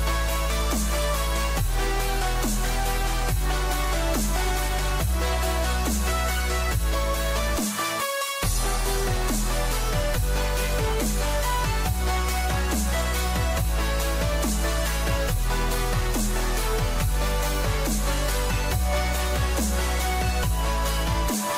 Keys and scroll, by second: 4.0 ctrl+=, 4.9 ctrl+0, 6.0 ctrl+-, 6.2 ctrl+=, 10.2 ctrl+alt+z.